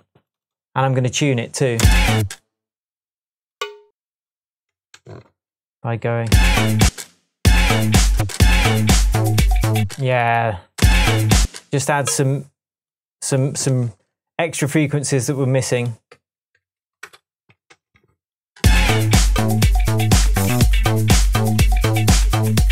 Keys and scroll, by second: 1.8 space, 4.9 Tab, 6.2 space, 6.8 space, 7.4 space, 9.8 space, 13.7 Tab, 17.0 Return, 17.6 Return, 17.7 shift+Tab, 18.6 shift+space, 20.2 super+d, 21.4 super+d, 22.0 super+d.